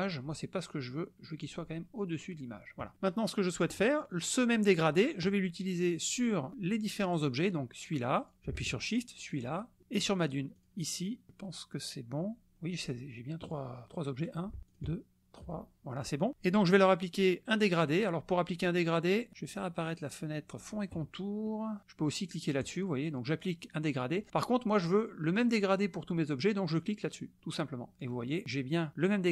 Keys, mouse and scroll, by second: 1.4 click, 7.1 click, 8.3 click, 9.2 shift+click, 10.5 shift+click, 13.4 drag, 14.2 drag, 14.7 shift+click, 20.6 click, 22.6 click, 27.4 click.